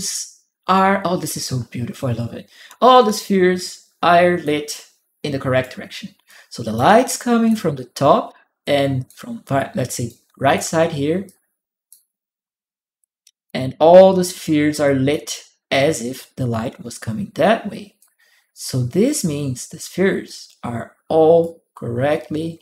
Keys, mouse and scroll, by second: 4.4 right click, 6.0 click, 6.7 click, 8.4 click, 9.8 click, 11.0 click, 12.8 click, 13.7 right click, 14.6 click, 17.8-21.2 drag, 21.8-22.6 drag.